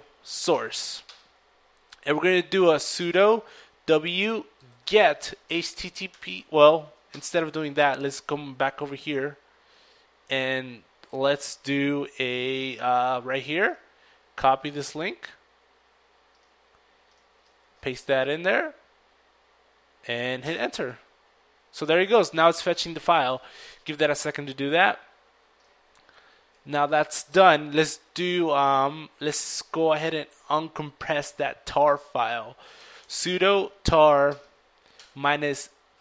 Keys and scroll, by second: 0.0-2.4 typing, 4.0-9.0 typing, 10.5 typing, 18.9-19.6 typing, 21.9 Return, 27.8-29.0 typing, 34.1-35.3 typing.